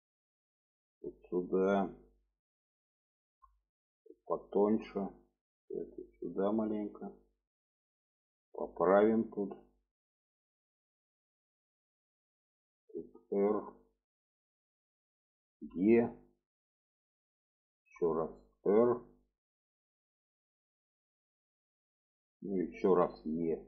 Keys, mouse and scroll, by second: 0.3-1.5 drag, 3.3 click, 4.1 click, 5.2 click, 6.3 click, 7.5 click, 8.4 click, 9.5 click, 10.3 click, 11.8 click, 13.0 r, 14.3 click, 15.7 e, 17.9 r, 20.9-22.1 drag, 23.0 e.